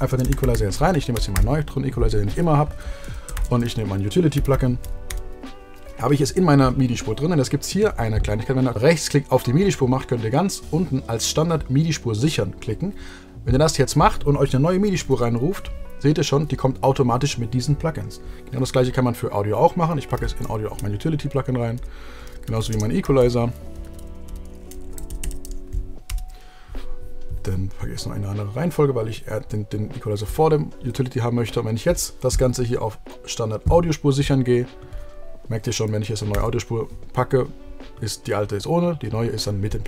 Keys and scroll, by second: 0.0-1.4 typing, 4.7 t, 5.3 Return, 15.2 shift+super+t, 20.3 super+f, 20.9 Return, 22.4-24.1 typing, 24.5 Return, 24.9 Down, 26.3 Return.